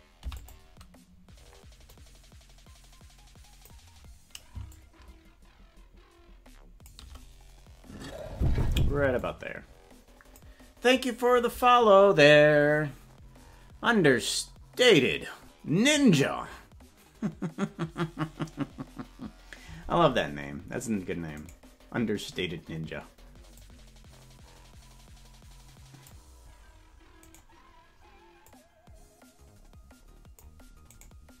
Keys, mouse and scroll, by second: 0.2 i, 1.9-3.8 drag, 4.7-7.0 shift+drag, 9.3-10.5 drag, 21.5 right click, 23.5-26.1 drag, 27.3 right click, 28.5-30.5 drag, 31.0 right click.